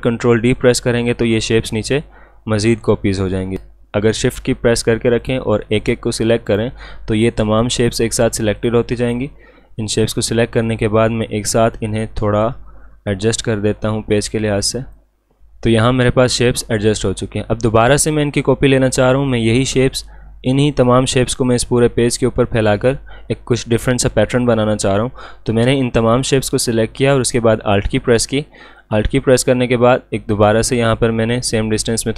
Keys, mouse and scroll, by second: 0.2 ctrl+d, 3.5 click, 5.2-14.3 shift+drag, 14.3-17.1 drag, 27.2 alt+Num_Lock, 28.8-32.1 alt+drag.